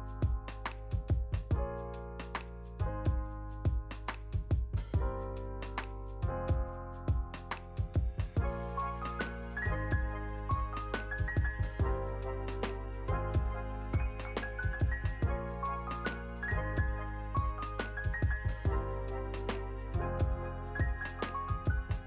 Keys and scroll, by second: 0.9 ctrl+c, 1.8 ctrl+v, 2.6 ctrl+s, 6.2 F9, 7.7 space, 9.6 space, 12.4-13.9 typing, 15.4 Left, 16.7 Right, 17.0-18.9 typing, 18.4 End.